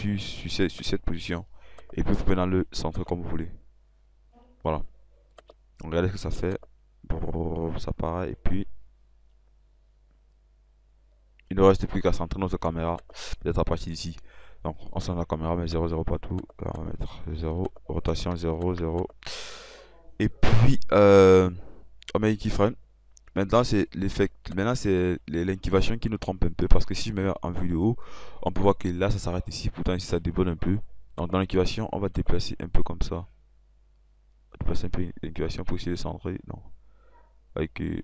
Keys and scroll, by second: 17.6 0.